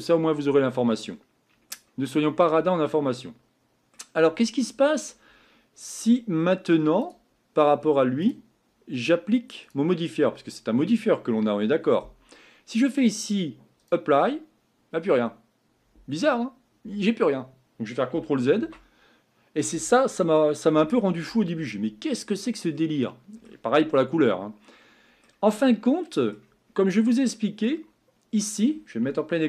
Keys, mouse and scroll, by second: 5.3 scroll up 3, 5.9-6.4 scroll down 2, 6.4-7.0 middle drag, 7.0 click, 8.3 click, 13.8-18.6 drag, 18.6 ctrl+z, 22.2-22.6 scroll down 2, 22.7 middle click, 23.5-24.3 scroll up 1.